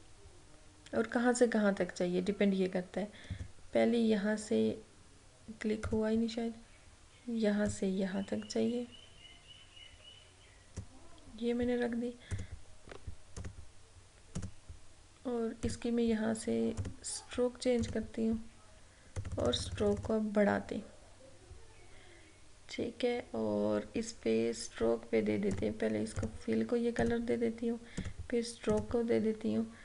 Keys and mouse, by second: 3.4 click, 5.9-12.4 drag, 25.6 click.